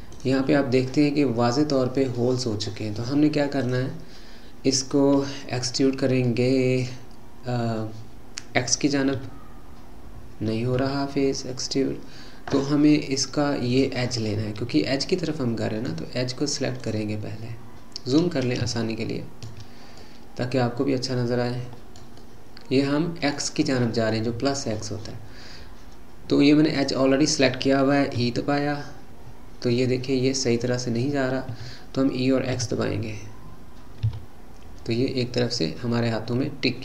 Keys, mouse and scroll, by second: 0.1 click, 2.2-3.6 middle drag, 3.6 click, 6.2-9.2 middle drag, 9.2 e, 13.7 click, 14.3-16.8 middle drag, 16.8 click, 17.4-18.7 scroll up 2, 18.7-26.8 shift+middle drag, 26.8 click, 28.1 e, 32.6 e.